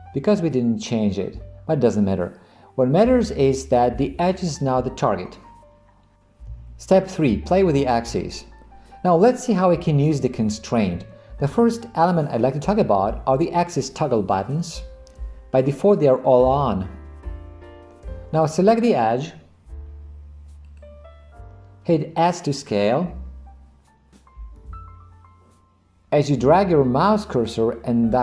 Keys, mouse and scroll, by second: 20.8 click, 24.6 s.